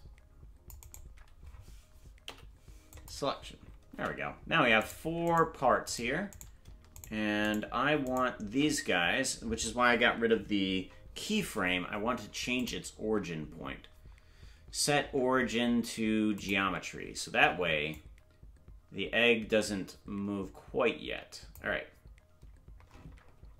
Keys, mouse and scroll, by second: 7.0 Tab, 7.0 shift+right click, 7.0 p, 9.0 right click, 12.6-16.5 drag, 17.9-21.6 drag.